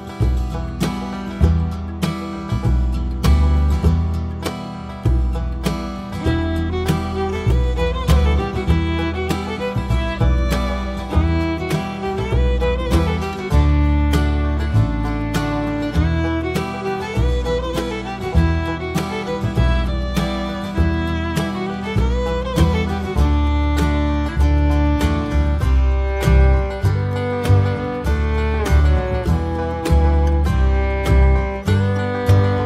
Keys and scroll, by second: 5.6 Return.